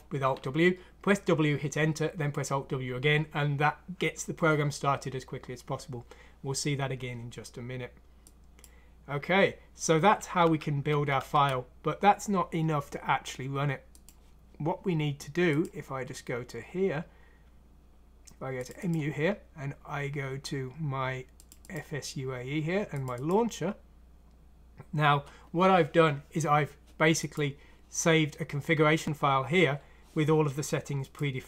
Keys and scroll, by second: 10.4 alt+Tab, 10.9 alt+Tab, 11.2 alt+Tab.